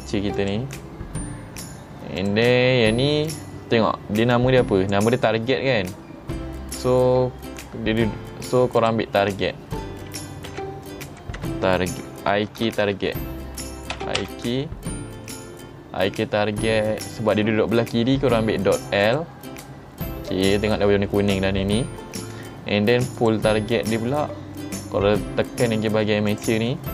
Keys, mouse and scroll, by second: 0.4 click, 2.3 click, 3.3 click, 4.4-5.0 drag, 8.9 click, 12.8 BackSpace, 12.9 BackSpace, 19.1 click, 23.2 click, 26.4 click.